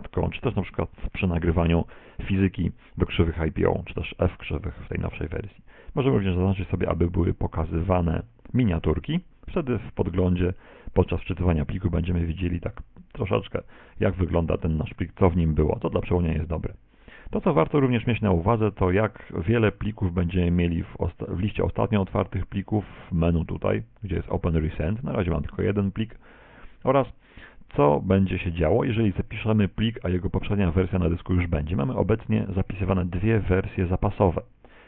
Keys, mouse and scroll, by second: 23.6 click.